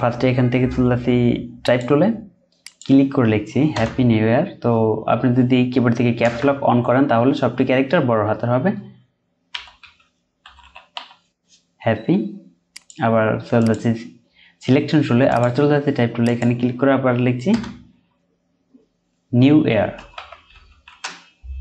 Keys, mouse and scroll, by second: 3.7 BackSpace, 9.5-10.9 typing, 17.5 typing, 19.9-20.5 typing.